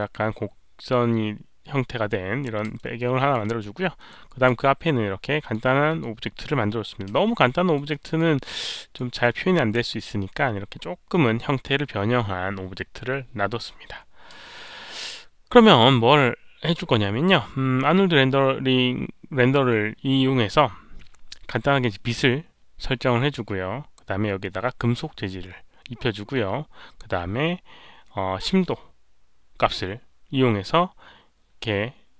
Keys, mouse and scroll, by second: 2.7 alt+right click, 2.7 alt+middle click, 2.8 alt+right click, 3.1 alt+click, 3.9 alt+click, 4.4 f, 5.4 alt+click, 5.8 alt+click, 7.2 alt+click, 7.9 alt+f, 7.9 alt+right click, 8.3-8.9 alt+drag, 13.6 alt+click, 14.4 alt+drag, 14.7 alt+right click, 15.1 alt+click, 15.6 alt+right click, 25.2 alt+click, 25.2 alt+right click.